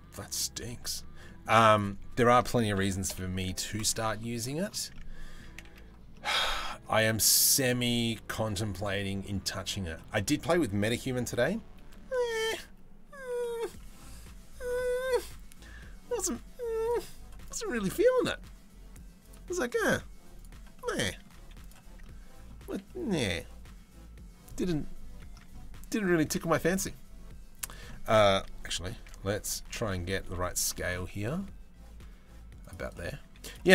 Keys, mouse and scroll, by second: 0.0 middle click, 0.9 middle click, 1.3 click, 2.4 ctrl+i, 2.7 Delete, 3.8 middle click, 4.5 middle click, 5.3 a, 5.7 middle click, 8.3 middle click, 13.0 middle click, 17.0-19.0 right drag, 20.0 right click, 20.4 middle click, 21.0 z, 21.4 a, 21.6 middle click, 22.2 a, 22.5 middle click, 26.0 ctrl+r, 27.5 middle click, 28.4 KP_3, 28.7 KP_1, 29.3 shift+middle click, 30.2 ctrl+r, 32.8 z, 33.3 shift+middle click.